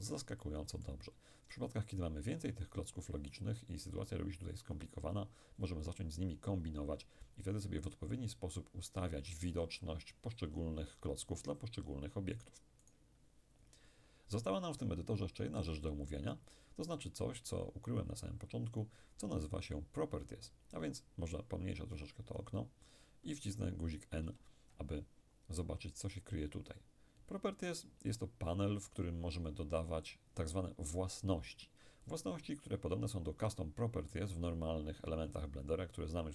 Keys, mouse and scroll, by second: 12.4 right click, 21.2-23.5 scroll down 1, 24.3 n, 26.7 click, 32.1-35.1 ctrl+middle drag.